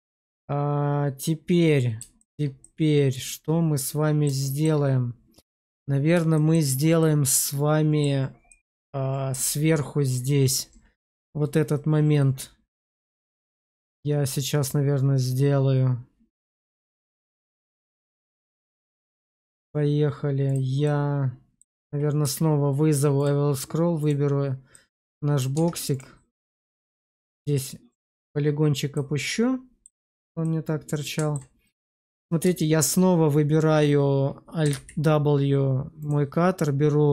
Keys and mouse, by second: 2.1 shift+middle click, 2.5-4.1 middle drag, 4.4 shift+middle click, 6.2 shift+middle click, 6.9-7.9 middle drag, 8.4 middle click, 20.4 click, 20.7 middle click, 22.1 q, 23.9 click, 24.6 middle click, 25.4 Tab, 26.9 click, 29.2 middle click, 29.9 Tab, 30.3 middle click, 31.7 shift+middle click, 32.5 shift+middle click, 34.6 alt+w, 35.9-37.1 drag.